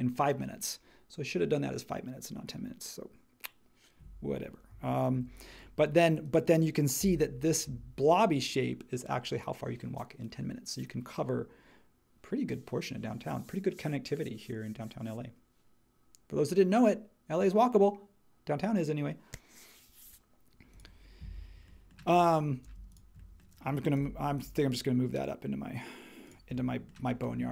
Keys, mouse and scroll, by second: 5.1 super+e, 7.0 n, 22.7 space, 23.9 m.